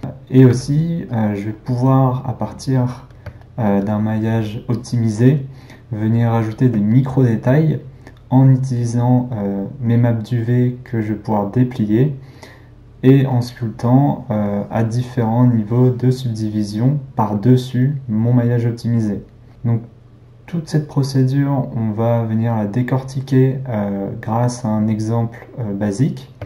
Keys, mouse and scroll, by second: 0.0 ctrl+middle click, 0.5 f, 3.5-4.8 ctrl+middle drag, 4.8-6.9 drag, 6.9-13.4 ctrl+middle drag, 13.4-26.4 drag.